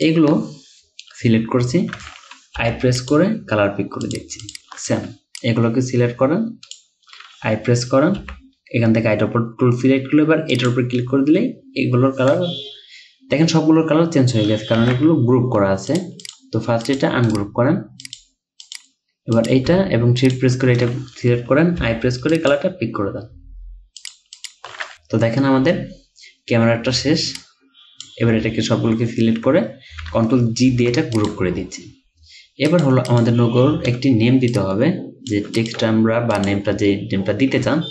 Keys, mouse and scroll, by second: 2.6 i, 4.5 double click, 8.2 i, 14.6-15.3 typing, 16.3 double click, 17.3 right click, 20.2 shift+click, 21.8 i, 24.4 double click, 24.9 scroll up 1, 25.1-30.0 scroll down 1, 30.8 ctrl+g, 33.1 double click, 34.6 alt+shift+click.